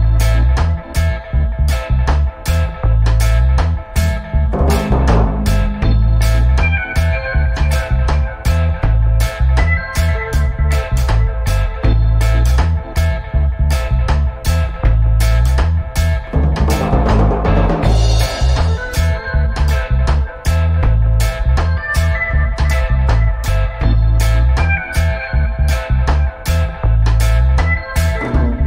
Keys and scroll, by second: 2.4 g, 15.9-17.0 typing, 25.8 Escape.